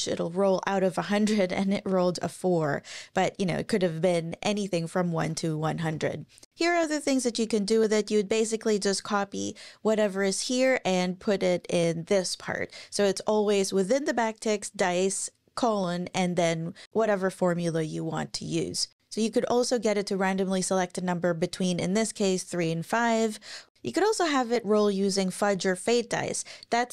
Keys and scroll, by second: 0.0 Up, 5.6 shift+super+Right, 5.9 BackSpace.